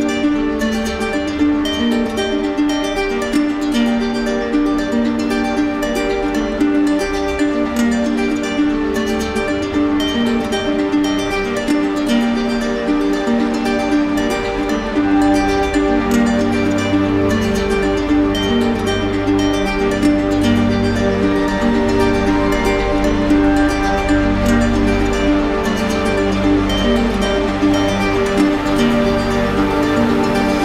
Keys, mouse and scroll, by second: 0.8 click, 2.2 right click, 3.0 right click, 3.6 alt+right click, 4.8 ctrl+d, 6.9 right click, 8.4 click, 9.3 right click, 10.9 click, 16.1 right click, 16.6 shift+right click, 23.7 right click, 24.1 shift+right click, 29.7-30.6 drag.